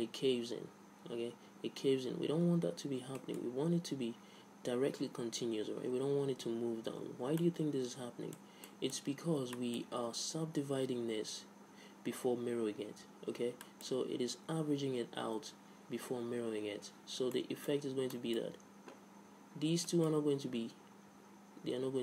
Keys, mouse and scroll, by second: 3.1 Tab, 3.4 middle click, 4.9 middle click, 7.3 Tab, 7.7-11.6 middle drag, 13.9-15.8 middle drag, 17.6-22.0 middle drag, 20.8 Tab.